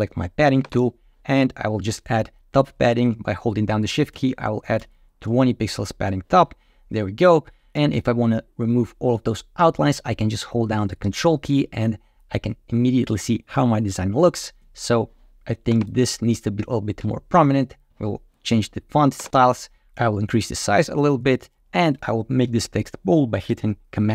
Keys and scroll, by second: 4.0 shift+Up, 21.4 super+b.